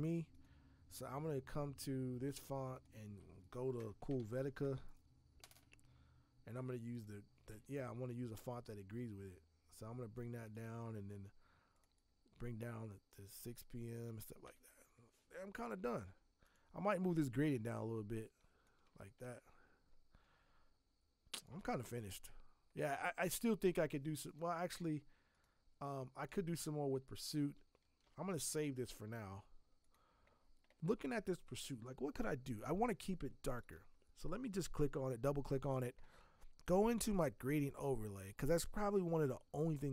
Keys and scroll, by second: 4.1 alt+c, 4.2 alt+o, 4.3 alt+o, 4.5 alt+l, 14.4 alt+Tab, 19.1 alt+Tab, 28.0 ctrl+alt+s, 28.8 alt+Tab.